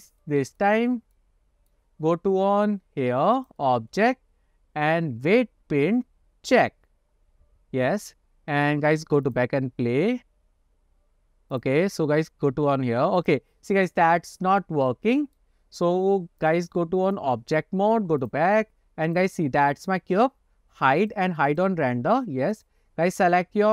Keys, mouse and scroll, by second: 0.7-1.0 shift+middle drag, 1.2-1.8 shift+middle drag, 3.5-7.1 drag, 9.4 click, 12.1 click, 13.4 click, 14.2-15.5 middle drag, 16.5-17.4 drag, 18.3 click, 19.2 click, 19.5-20.2 scroll down 2, 21.1 click, 21.6 click, 22.2-22.8 scroll up 2, 22.6 click.